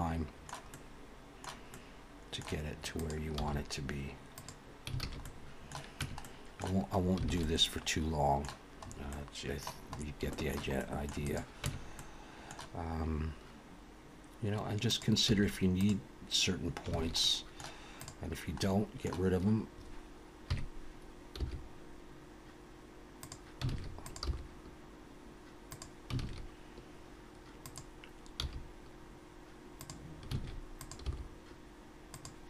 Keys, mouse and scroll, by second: 0.7 middle click, 1.7 middle click, 3.0 click, 3.4 g, 5.0 alt+a, 5.2 middle click, 6.0 Tab, 6.2 middle click, 7.0 scroll down 3, 7.3 alt+a, 7.4 middle click, 8.8 scroll up 1, 9.1 middle click, 9.9 scroll up 3, 10.3 shift+middle click, 10.8 middle click, 11.2 click, 11.6 Tab, 12.0 middle click, 14.9 click, 15.3 x, 17.0 alt+a, 17.2 middle click, 17.9 click, 18.6 middle click, 20.5 KP_3, 21.4 g, 23.7 alt+a, 24.0 click, 24.2 g, 26.2 alt+a, 27.6 click, 28.4 g, 30.3 alt+a, 30.8 click, 31.1 g.